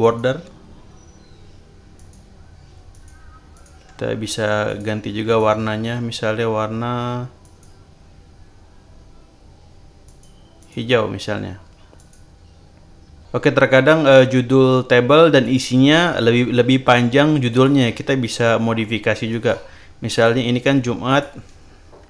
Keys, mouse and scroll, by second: 0.0 click, 1.9 click, 2.9 click, 3.5 click, 4.6 shift+click, 5.2 shift+click, 7.4 click, 10.0 click, 10.5 click, 11.9 click, 15.4 click, 17.4 click, 19.2 right click, 20.1 click, 21.0 click.